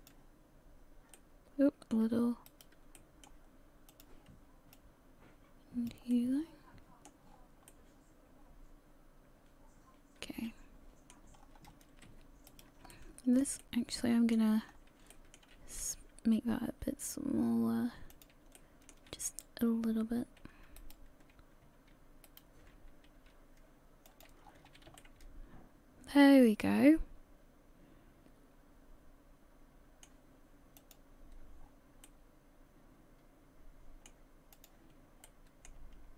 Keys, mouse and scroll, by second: 30.8 click, 31.6 scroll down 4, 32.0 middle click.